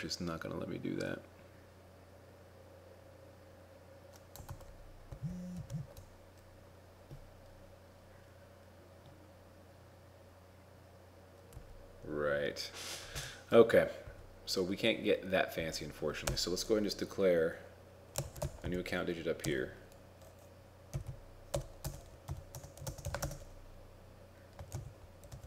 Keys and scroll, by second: 4.6 ctrl+Tab, 4.8 ctrl+Left, 5.2 ctrl+Down, 5.3 ctrl+Down, 5.6 ctrl+Up, 18.3 shift+a, 24.6-25.4 typing.